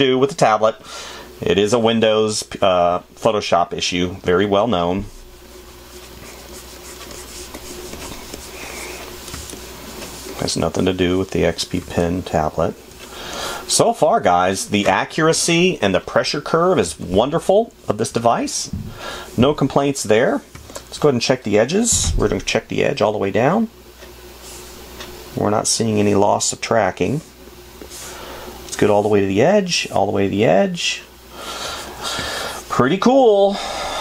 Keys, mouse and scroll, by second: 12.5 space, 14.4 space, 17.2 space, 20.9 space, 32.6 space.